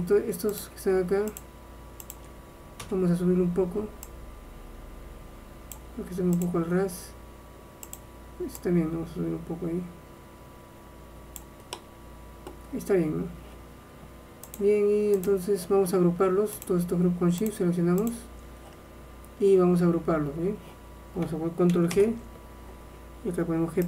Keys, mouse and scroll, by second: 0.7-4.0 drag, 2.9 KP_1, 4.2-6.0 drag, 6.6-10.5 drag, 11.8-14.6 middle drag, 14.6-16.5 drag, 16.7-20.0 drag, 22.0 ctrl+g.